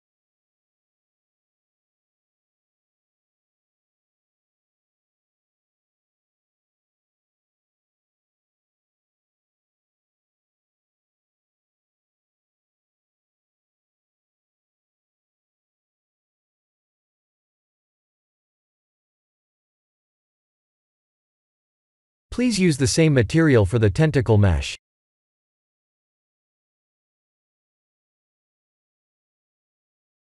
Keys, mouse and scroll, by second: 1.0 click, 5.5 click, 8.1 click, 9.4 click, 11.9 g, 12.1 z, 14.8 click, 15.7-18.0 middle drag, 20.5 click, 23.7-24.4 middle drag, 27.5 click, 28.4-30.1 drag.